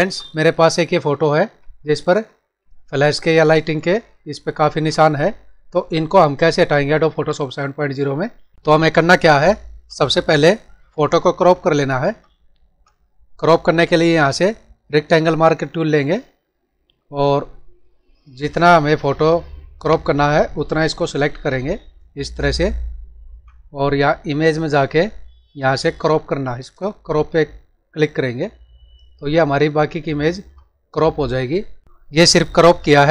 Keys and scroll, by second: 1.2 ctrl+=, 2.6 space, 4.1 ctrl+-, 10.6 ctrl+-.